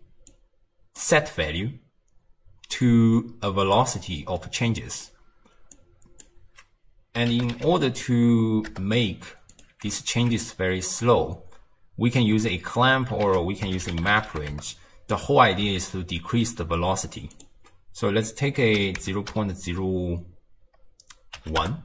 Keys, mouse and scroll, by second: 0.3 click, 2.8 click, 4.4-5.7 middle drag, 5.7 drag, 10.0 alt+click, 11.1-12.5 scroll up 2, 12.5 middle click, 13.3 ctrl+a, 15.7 x, 17.3-20.5 drag.